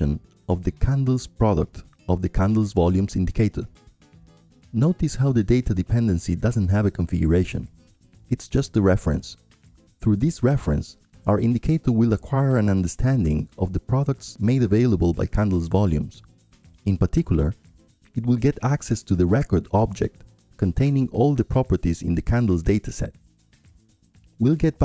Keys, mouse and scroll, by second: 0.0-1.1 drag, 1.3-9.3 drag, 3.2 ctrl+Left, 3.6 ctrl+Left, 4.1 ctrl+Left, 4.2 ctrl+Left, 4.4 ctrl+Left, 4.6 ctrl+Left, 4.8 ctrl+Left, 5.2 ctrl+Left, 5.7 ctrl+Up, 5.9 ctrl+Up, 6.2 ctrl+Up, 6.3 ctrl+Up, 6.8 ctrl+Up, 7.1 ctrl+Left, 7.3 ctrl+Left, 7.4 ctrl+Left, 7.8 ctrl+Left, 7.9 ctrl+Left, 8.1 ctrl+Left, 8.3 ctrl+Left, 8.4 ctrl+Left, 8.9 ctrl+Up, 9.3 ctrl+Up, 9.9 ctrl+Left, 10.2 ctrl+Left, 11.0 ctrl+Left, 13.4 click, 14.5-16.6 drag, 17.8-22.7 right drag, 22.7 middle click, 22.9-24.8 drag.